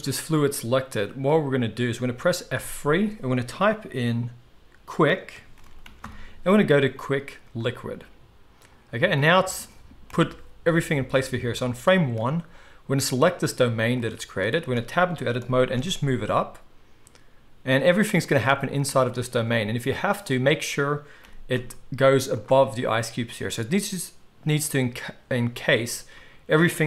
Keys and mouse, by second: 2.6 F3, 10.1 KP_1, 11.6-12.9 drag, 12.9-13.2 middle drag, 13.2 click, 13.4-13.9 middle drag, 13.9-18.0 drag, 14.7 Tab, 15.4 g, 18.0-20.0 shift+middle drag, 20.0 click, 20.5-26.8 middle drag, 21.2 g.